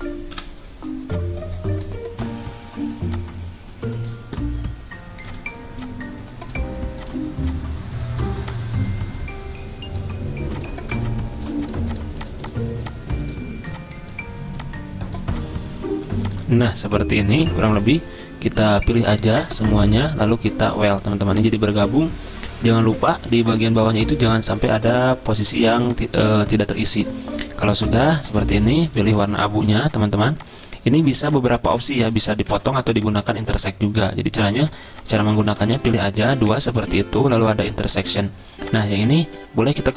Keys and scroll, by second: 0.3 Delete, 29.7 ctrl+z, 32.5 ctrl+z, 36.5 ctrl+z.